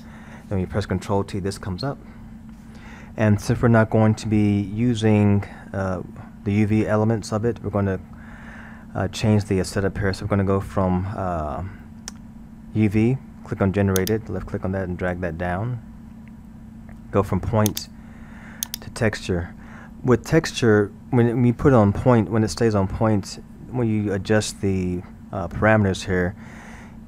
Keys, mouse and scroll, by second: 2.4-2.9 scroll, 2.9-4.5 middle drag, 4.5 scroll, 8.0 scroll, 8.9-11.9 middle drag, 14.0 click, 17.7-20.7 drag, 23.8-26.8 middle drag.